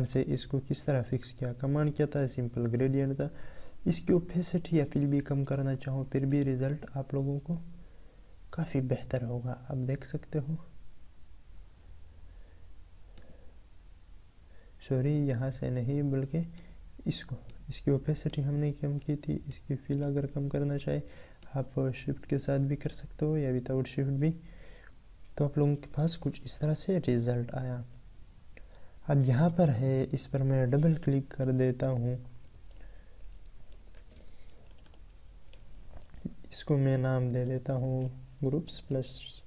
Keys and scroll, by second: 26.4 ctrl+Tab.